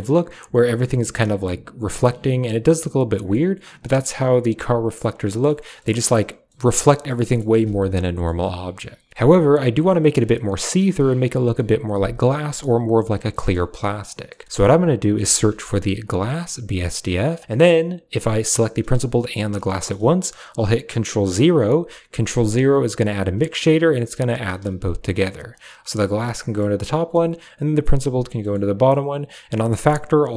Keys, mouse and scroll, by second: 0.6-3.2 middle drag, 4.0-5.5 middle drag, 5.8 middle click, 6.5 middle click, 6.9-7.3 middle drag, 7.6-8.1 middle drag, 8.5 click, 8.9 middle click, 13.2 middle drag, 14.2 middle click, 14.4 shift+a, 17.3 click, 17.7 click, 17.8 click, 18.4 drag, 19.0 shift+click, 21.0 ctrl+0, 22.6 click, 23.7 b, 24.1 g, 24.5 a, 24.8 click, 26.5 middle click, 27.4 drag, 28.3 middle click, 29.5-30.3 drag.